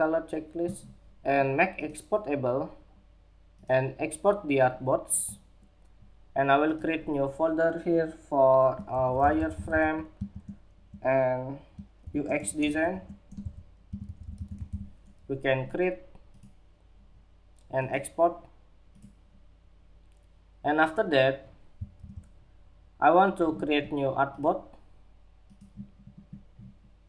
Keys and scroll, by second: 21.5 super+-.